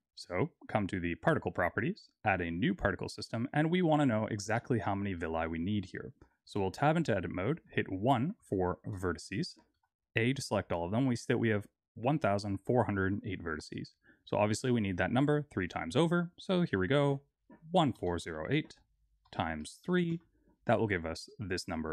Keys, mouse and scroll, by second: 1.1 click, 2.2 click, 3.7 middle click, 5.1 middle click, 6.2 Tab, 6.8-7.6 scroll down 3, 7.6 scroll down 2, 7.6 1, 8.4 shift+middle click, 9.7 a, 16.5 click.